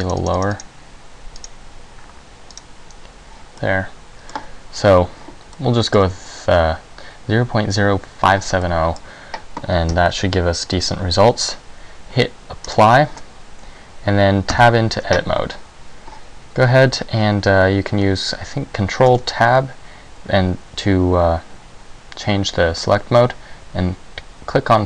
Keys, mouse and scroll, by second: 0.1 click, 0.3 click, 0.5 click, 0.7 click, 1.5 click, 2.6 click, 3.7 middle click, 5.7 middle click, 8.7 middle click, 10.0 Tab, 10.9 Tab, 12.9 click, 14.6 Tab, 19.3 ctrl+Tab.